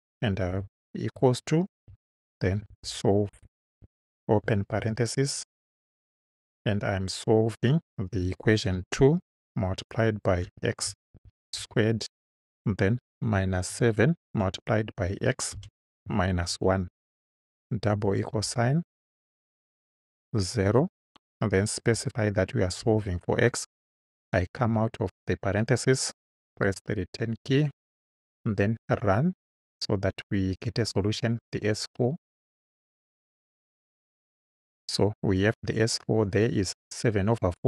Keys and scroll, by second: 0.5 =, 1.9-4.7 typing, 8.7 2, 9.4 shift+8, 10.5 x, 11.2 shift+6, 11.6 shift+2, 12.3 2, 13.3 -, 13.7 7, 14.3 shift+8, 15.6 x, 16.1 -, 16.5 1, 17.9 =, 20.7 0, 21.9 ,, 22.8 x, 24.7 Right, 26.6 Return.